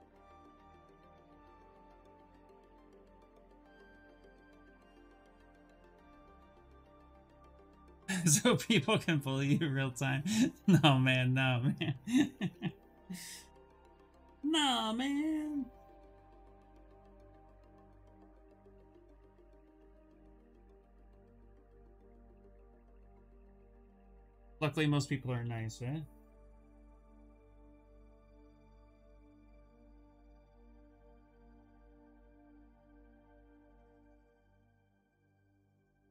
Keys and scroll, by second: 25.0 b, 25.9 v, 27.0 c, 34.7 v, 35.3 c.